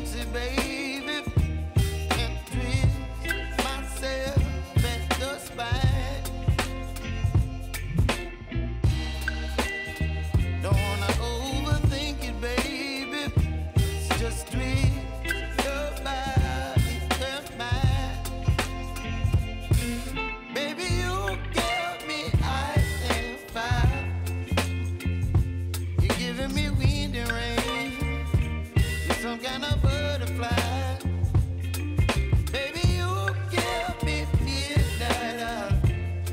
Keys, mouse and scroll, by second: 4.2 ctrl+r, 5.7-9.8 drag, 9.8 p, 10.7 click, 10.9 space, 15.6 space, 16.7 v, 17.3-20.6 drag, 20.6 Left, 25.0 space, 27.9 space, 29.0-31.5 drag, 31.5 space, 35.6 space, 36.2-36.3 drag.